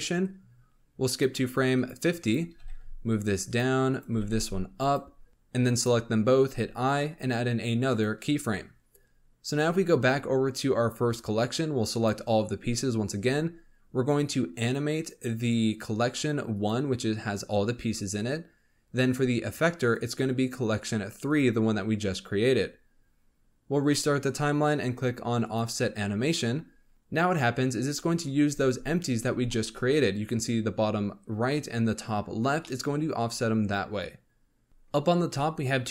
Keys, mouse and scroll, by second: 0.2-1.8 drag, 2.2 click, 2.4 g, 3.9 click, 4.1 g, 5.3 click, 6.4 i, 9.5 1, 10.4-11.1 scroll down 1, 11.1 click, 12.9 scroll up 1, 14.6-17.6 drag, 19.7-22.8 drag, 23.7-26.9 drag, 26.9-28.4 scroll down 2, 28.4 space, 28.8 scroll up 1, 29.4-32.4 shift+middle drag, 32.6-35.9 middle drag.